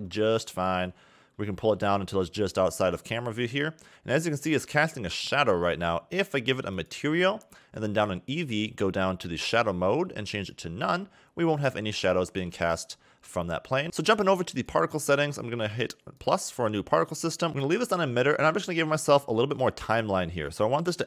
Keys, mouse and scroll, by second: 0.1 KP_0, 0.9-1.8 scroll down 1, 1.8 g, 6.7 click, 7.5-9.0 scroll down 29, 9.4-12.2 drag, 12.2 a, 12.4 a, 13.2-13.7 scroll down 2, 13.7 scroll up 1, 13.8 click, 14.5 click, 16.2 click, 17.5 click, 20.6 click.